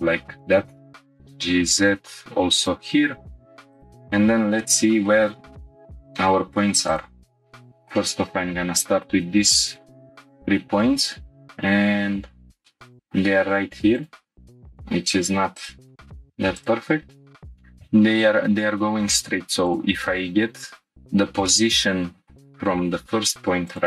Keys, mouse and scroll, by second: 0.0 g, 0.2 z, 1.1 click, 1.1 z, 2.5-3.8 drag, 4.6-5.1 shift+middle drag, 6.9 click, 7.4-7.9 shift+middle drag, 8.4-8.8 scroll up 2, 9.2 g, 9.7 y, 12.5 click, 12.6-13.1 shift+middle drag, 13.9-14.4 drag, 14.4 g, 14.4 y, 15.5 click, 16.6-17.4 drag, 20.3-20.9 scroll down 4, 21.1 scroll up 1, 21.5 middle click.